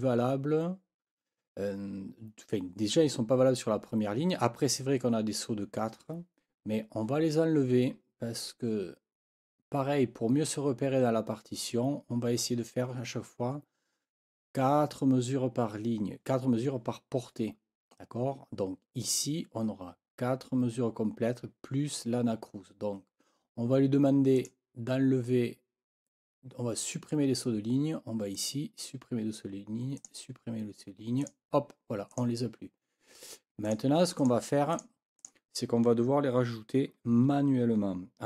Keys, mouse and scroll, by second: 24.4 click, 28.3 click, 30.0 click, 31.2 click, 32.1 click, 33.6 click, 34.2 click, 34.7 click, 35.2 click.